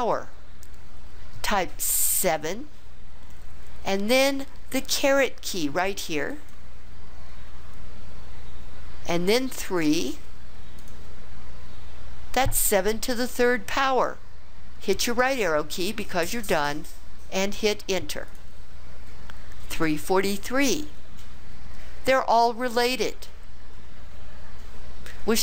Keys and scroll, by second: 2.1 7, 6.3 ^, 10.8 3, 15.2 ), 18.3 Return.